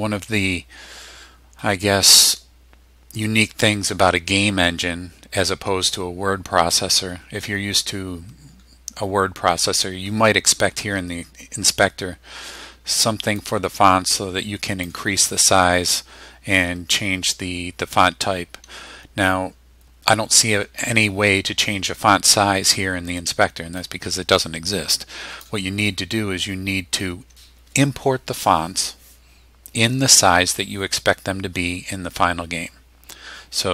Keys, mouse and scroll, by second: 13.4-15.0 drag, 23.8-25.6 drag.